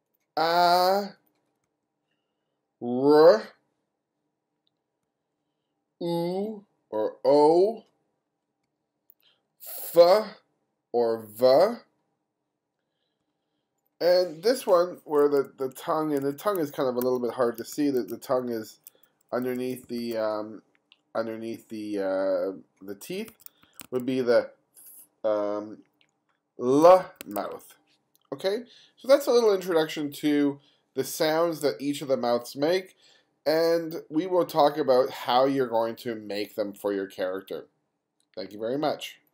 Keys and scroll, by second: 1.7 ], 5.1 ], 8.7 ], 13.3 ], 15.3 F2, 16.3 F2, 17.1 2, 23.4 1, 24.1 1, 28.1 1.